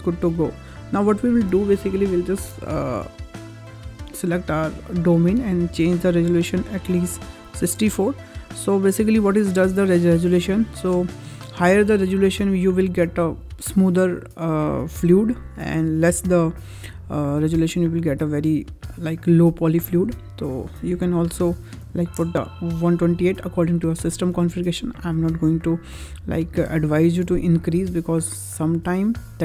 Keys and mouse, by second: 0.6 middle click, 4.0 click, 5.6-8.5 drag, 20.4-22.5 drag.